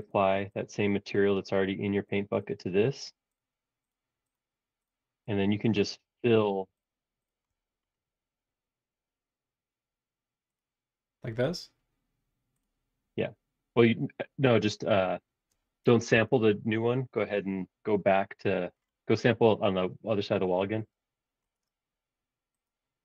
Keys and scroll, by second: 16.1 super+z.